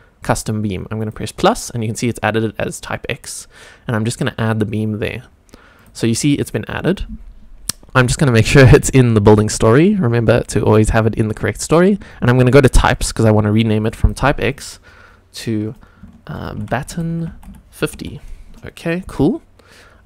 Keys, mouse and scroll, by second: 5.7 click, 6.2 click, 8.3 drag, 10.3 click, 12.9 click, 13.8 click, 14.7-18.5 drag, 17.1 t.